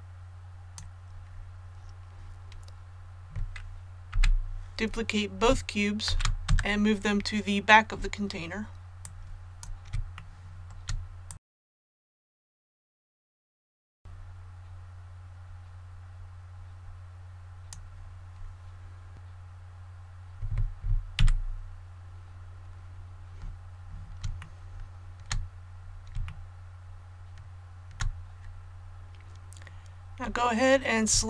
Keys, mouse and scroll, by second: 8.9 click, 10.1 shift+middle click, 11.2 click, 11.5 shift+middle click, 11.9 click, 12.1 shift+middle click, 12.7 click, 13.0 shift+middle click, 13.3 click, 13.6 shift+middle click, 13.9-18.0 drag, 21.2 a, 22.6 scroll down 1, 24.4 shift+middle click, 25.4-25.8 scroll down 1, 26.3 shift+middle click, 27.0-28.6 shift+middle drag, 30.6 scroll up 1.